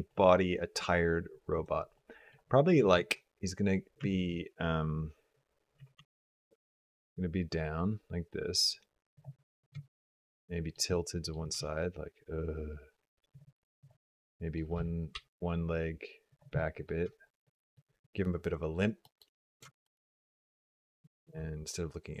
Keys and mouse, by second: 1.8 middle click, 2.6 g, 9.3 middle drag, 9.7 shift+middle click, 9.9-10.6 shift+middle drag, 10.8-11.1 middle drag, 11.4 r, 13.7 click, 13.9 middle click, 14.6 g, 16.5 middle click, 16.9 shift+middle click, 17.2 middle click, 17.5 click, 17.8 click, 18.9 middle click, 18.9 click, 19.5 shift+middle click, 21.2 g.